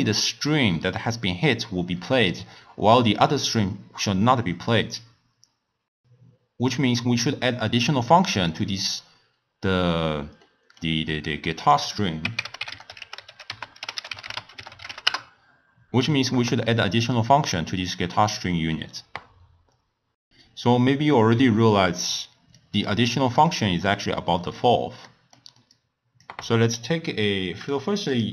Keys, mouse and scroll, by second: 5.8 click, 8.5 click, 10.4-11.7 middle drag, 11.7-14.7 drag, 22.5 click, 23.4-25.7 middle drag, 25.7 click, 27.7 drag, 28.1 click.